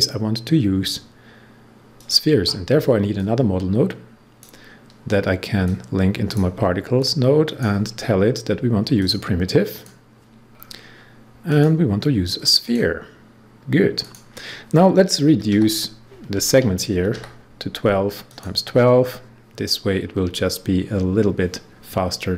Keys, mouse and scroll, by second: 7.9 scroll down 1, 8.9 click, 9.6 click, 10.4 scroll down 1, 11.4 click, 13.9 click, 15.0-17.5 typing, 16.3 Tab, 18.2 click.